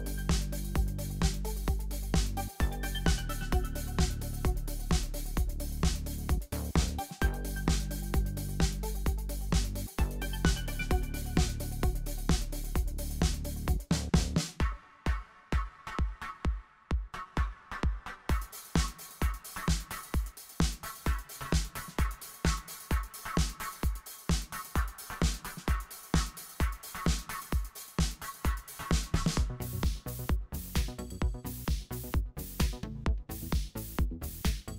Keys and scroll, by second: 0.8 Right, 0.9 Left, 1.0 Left, 1.0 Left, 1.3 Right, 1.4 Left, 1.9 super+0, 2.1 Right, 2.2 Right, 2.4 Right, 4.5 super+0, 4.8 Tab, 4.9 Tab, 5.1 Tab, 12.4 Tab, 12.5 Tab, 12.7 Tab, 16.3 Right, 16.5 Right, 19.8 Right, 20.0 Right, 20.0 Left, 21.0 Right, 21.0 Right, 21.1 Left, 22.6 shift+super+a, 23.3 Left, 23.4 Left, 28.1 shift+super+a, 28.4 v, 31.5 super+a, 32.3 k, 32.5 Left, 32.6 Left.